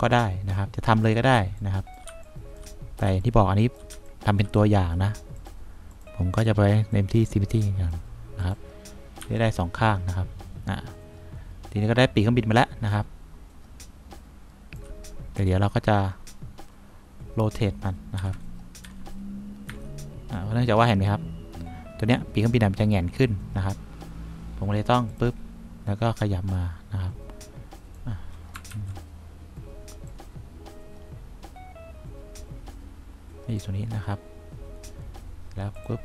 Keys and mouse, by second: 1.5 1, 2.2 3, 3.2 2, 4.1 1, 9.4 3, 12.0-13.2 drag, 14.2 click, 18.3 F2, 19.0 F3, 19.8 F4, 28.8 ctrl+z.